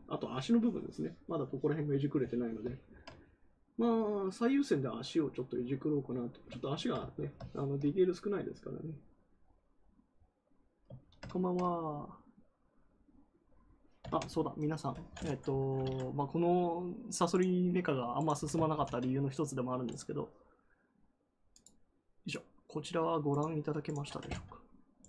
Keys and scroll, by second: 18.6 ctrl+v.